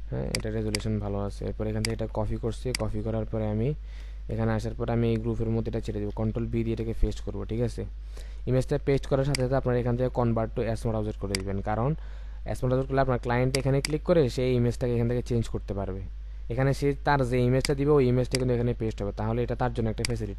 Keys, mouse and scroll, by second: 0.7 right click, 6.2 ctrl+v, 9.2 right click, 13.7 double click.